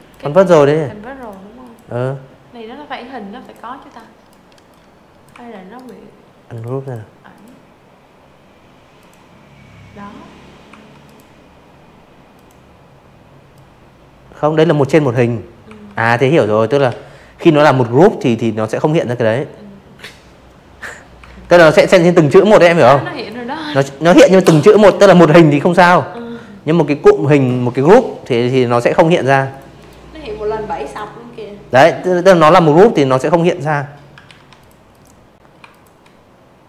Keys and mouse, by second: 0.3 click, 0.9 click, 1.6 click, 2.2 v, 2.7 right click, 3.5 click, 3.7 click, 4.3 click, 5.9 click, 7.6 v, 8.0 click, 9.3 click, 10.5-12.0 drag, 12.6 v, 13.0 click, 13.8 ctrl+z, 14.3-14.9 drag, 15.9 click, 18.1 v, 19.2 v, 19.4 click, 20.1 click, 21.3 click, 23.0 v, 23.7-24.4 drag, 25.8 ctrl+g, 26.4 click, 26.7 click, 27.7 click, 29.4 v, 31.2 ctrl+z, 31.5 click, 31.8 click, 32.6 shift+click, 34.4 click, 35.3 v, 35.8 click, 36.2 click.